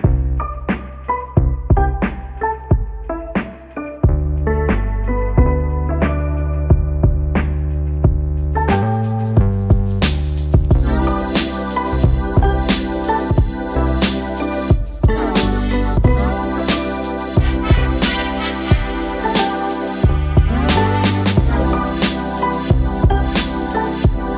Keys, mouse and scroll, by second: 9.8 right click, 10.6 click, 11.5-12.1 alt+scroll up 1, 13.9 click, 18.2 Delete, 19.2-19.5 alt+scroll down 1, 20.5-24.3 drag.